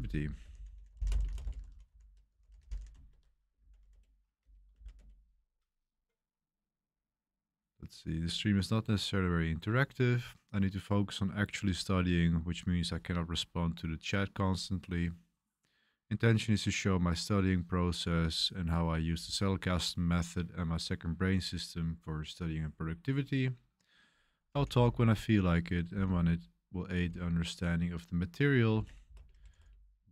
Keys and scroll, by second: 0.0-5.2 typing, 24.5 typing, 25.9 j, 27.0 k, 28.5-30.0 typing.